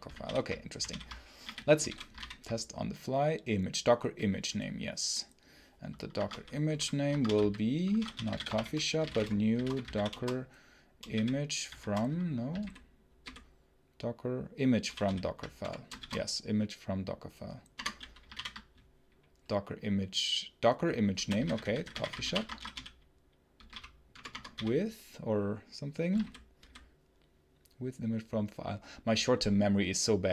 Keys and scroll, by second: 0.7 ctrl+super+l, 1.0-2.2 typing, 5.9-11.5 typing, 14.9 ctrl+super+l, 15.5 ctrl+BackSpace, 15.8 shift+i, 17.6 Return, 18.2 ctrl+p, 20.8-24.4 typing, 24.1 Return.